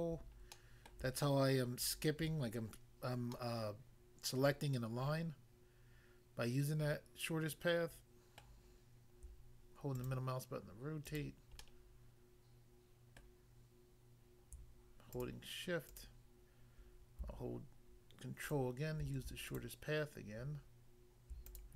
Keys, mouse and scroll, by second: 0.5 middle click, 0.9 middle click, 1.8 shift+click, 3.4 middle click, 8.4 middle click, 10.0 shift+click, 11.1 shift+click, 11.6 middle click, 13.2 middle click, 15.1 shift+click, 15.9 shift+click, 16.0 shift+click, 18.4 ctrl+click, 19.5 shift+click, 21.5 shift+click.